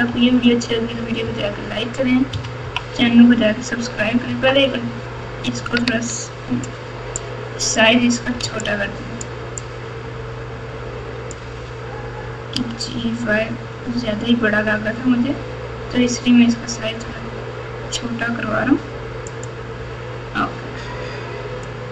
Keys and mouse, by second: 0.0-1.2 typing, 2.3 KP_6, 2.6 KP_3, 4.3 Tab, 7.2 click, 8.4 alt+z, 8.6-11.3 drag, 12.5 g, 21.8-21.9 drag.